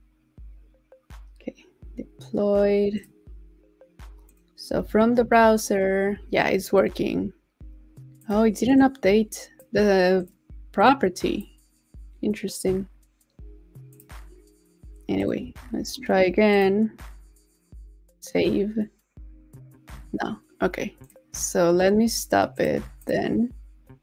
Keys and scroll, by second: 5.2 super+r, 15.5 super+a, 15.8 super+v.